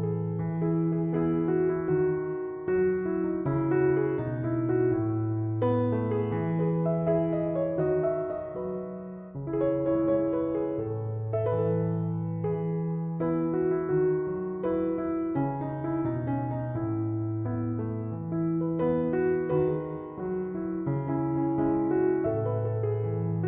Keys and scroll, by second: 0.6 Return.